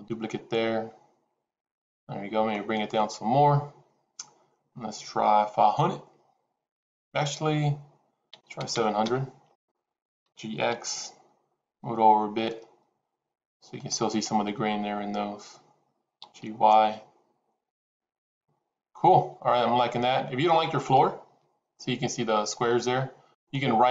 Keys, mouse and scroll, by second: 2.7-9.6 drag, 8.6 KP_0, 10.4 g, 16.4 g, 20.7 click, 23.5-23.9 right drag.